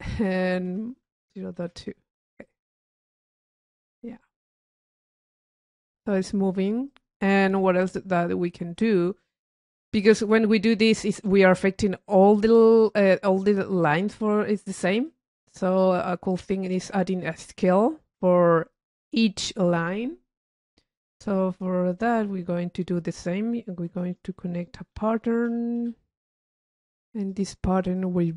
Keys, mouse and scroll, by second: 2.6 click, 4.0 click, 4.3 middle click, 4.6 scroll up 2, 4.7 middle click, 5.1 click, 6.4-7.4 drag, 8.1-9.8 drag, 10.0 click, 15.2-17.1 drag, 19.6-21.0 middle drag, 21.7 click, 24.1 Tab, 25.1 p, 26.5 click.